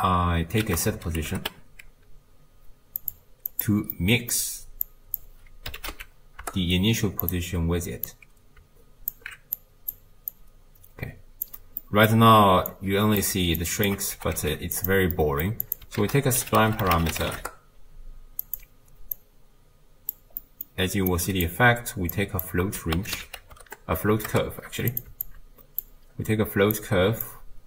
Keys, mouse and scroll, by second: 3.3 ctrl+a, 4.9 click, 8.1-9.1 drag, 9.6-11.5 drag, 12.7-13.2 drag, 15.6-17.4 drag, 17.4 a, 20.2 click, 22.4 click, 25.3 alt+click, 27.3-27.6 drag.